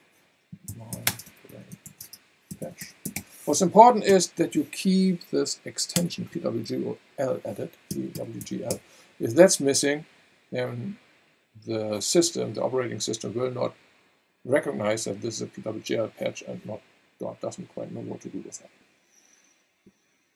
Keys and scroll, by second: 0.4-3.6 typing, 4.1 alt+Right, 5.9 alt+BackSpace, 7.6-9.2 typing.